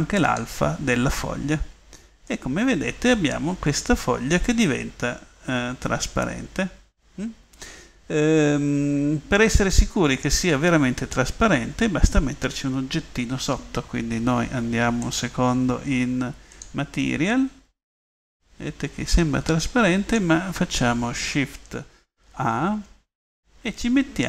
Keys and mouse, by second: 5.0 middle click, 5.9 middle click, 6.1 middle drag, 6.6 middle click, 16.7 click, 18.3-18.9 middle drag, 19.4 middle click, 22.4 shift+a.